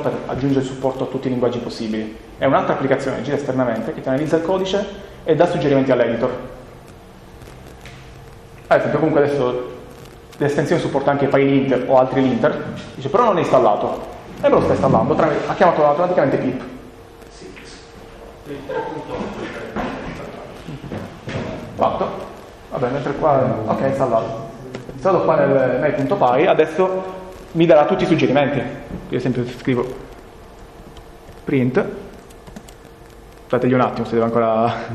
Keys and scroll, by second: 30.0 typing.